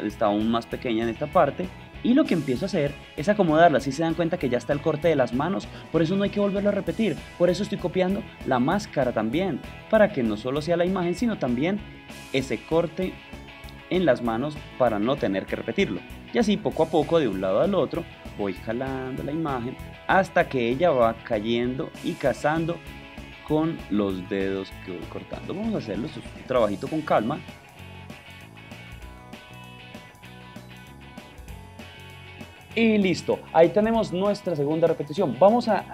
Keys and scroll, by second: 26.7 shift+Up.